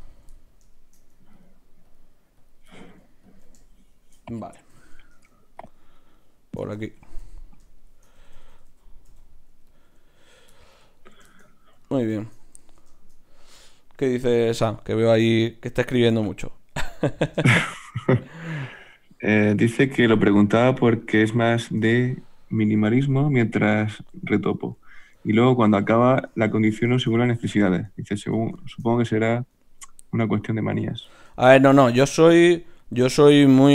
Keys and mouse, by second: 3.9 right click, 4.7 f, 5.1 ctrl+Tab, 5.9 click, 6.6 f, 7.0 f, 7.2-8.7 f, 9.1 f, 10.2-13.1 drag, 15.7 e, 18.6 s, 19.6 click, 20.0 g, 21.0-23.2 drag, 21.8 f, 22.0-26.2 middle drag, 26.2 ctrl+Tab, 27.1 a, 27.3 a, 28.2 ctrl+n, 30.7 click, 31.9-33.6 middle drag.